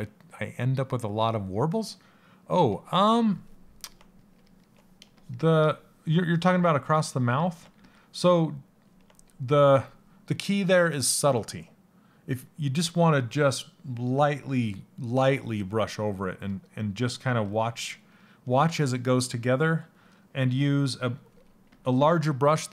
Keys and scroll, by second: 7.4 s, 21.2 s.